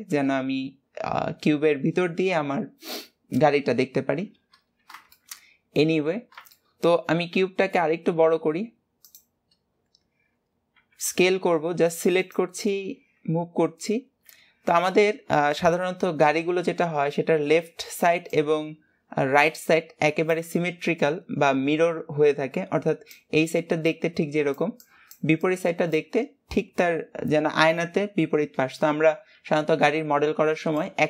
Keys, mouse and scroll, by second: 0.1-5.3 middle drag, 5.4 middle click, 5.6 middle click, 5.8 middle click, 6.6 middle click, 14.7-15.7 scroll down 7, 15.7-16.6 scroll up 1, 16.6-31.0 scroll up 1.